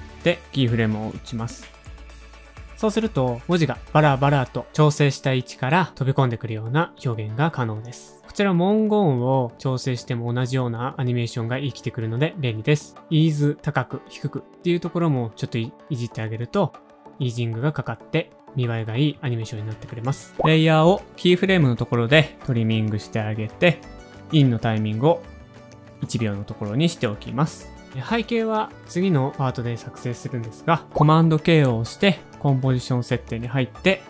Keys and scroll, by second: 0.9 space, 1.1 space, 13.0-14.6 typing, 16.7 space, 20.0-20.8 typing, 21.1 alt+[, 22.2 u, 23.9 alt+[, 24.7 shift+Page_Up, 24.9 shift+Page_Up, 25.0 shift+Page_Up, 25.5 Page_Down, 25.6 Page_Down, 26.9 [, 27.9 shift+super+a, 27.9 space, 27.9 v, 28.5 shift+super+a, 32.7 super+k.